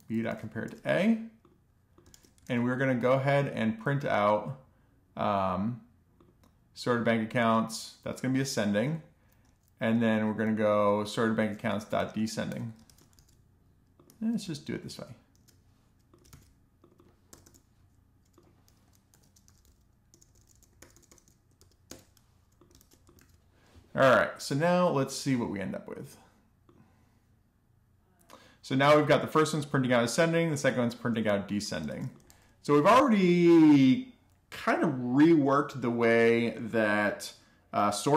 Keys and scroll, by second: 0.0 a, 1.2 alt+shift+f, 1.6 super+s, 8.3 Up, 8.6 alt+shift+Down, 10.5-11.6 typing, 11.9 alt+shift+f, 12.2 super+s, 13.2-14.4 typing, 15.3 alt+shift+f, 16.3 BackSpace, 16.5 BackSpace, 18.1 F2, 18.2-20.9 typing, 21.8 alt+shift+f, 22.1 super+s, 30.8 alt+shift+f, 31.2 super+s.